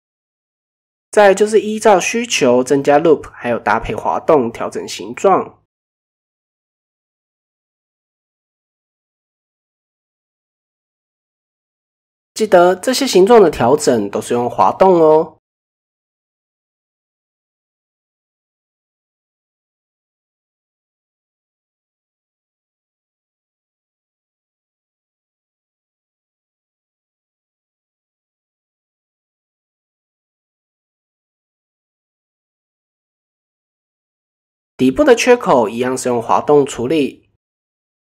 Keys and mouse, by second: 1.2-1.8 middle drag, 3.1-3.5 middle drag, 4.6 g, 7.2 g, 8.8 g, 9.8 middle click, 10.8 click, 11.0 g, 12.9-14.3 middle drag, 15.0 g, 16.7 g, 18.0 middle click, 18.9 shift+middle click, 19.8 click, 20.1 middle click, 21.5 g, 24.1 click, 24.4 middle click, 25.5 middle click, 27.1 g, 28.9-31.1 middle drag, 31.2 middle click, 32.6 middle click, 33.8 shift+middle click, 34.7 click, 37.4 shift+click.